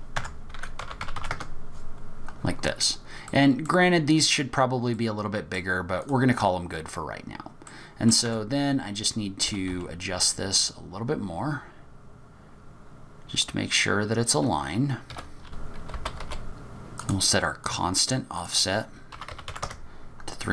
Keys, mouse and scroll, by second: 2.8-3.3 scroll up 3, 3.2 middle click, 4.9 middle click, 6.0 click, 6.6-7.5 scroll up 5, 7.6 middle click, 8.2 Tab, 8.5-9.1 scroll up 3, 9.4 g, 15.4-15.8 scroll down 5, 15.8 g, 16.0 middle click, 16.1 Tab, 16.1 middle click, 16.4 click, 17.0 click, 17.6 click, 18.4 click.